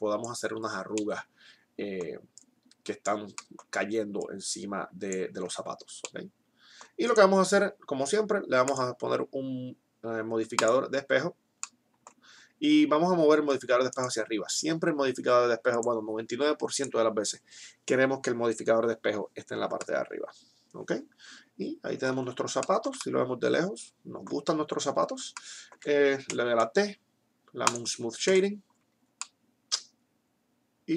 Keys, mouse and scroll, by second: 2.4-5.7 drag, 5.7 Tab, 11.9-14.1 middle drag, 14.1-18.9 drag, 20.1-21.9 middle drag, 22.9-26.6 middle drag, 26.6 t, 28.6 t.